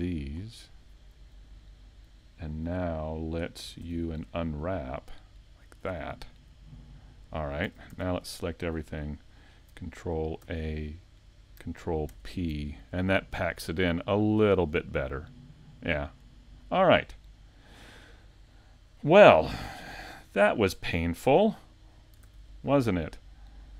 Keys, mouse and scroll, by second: 16.9 shift+middle click, 16.9 scroll down 1, 17.3 middle click, 19.7 a, 20.5 middle click, 21.2 Tab.